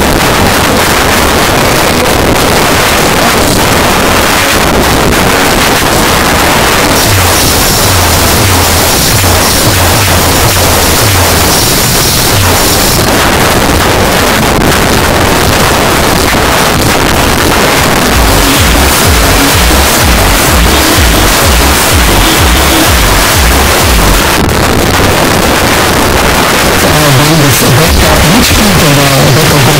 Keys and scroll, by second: 1.3 g, 1.4 Down, 1.9-2.4 Down, 2.5 Down, 2.8 Down, 2.9 Return, 13.0 Page_Down, 24.2 Page_Down.